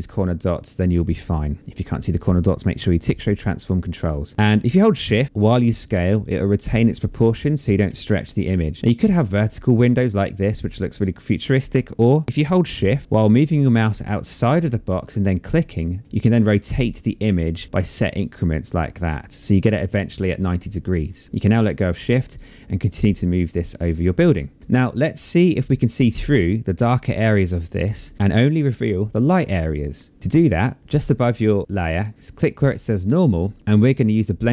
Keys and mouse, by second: 3.2 click, 6.9 click, 14.7 shift+click, 21.4 click, 32.0 click, 34.4 click.